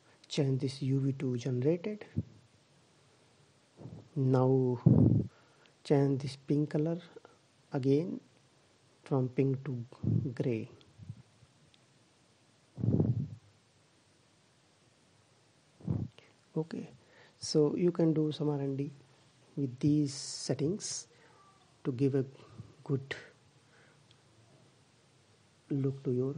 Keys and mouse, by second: 3.5-10.3 middle drag, 10.9-12.3 drag, 22.4-24.8 drag.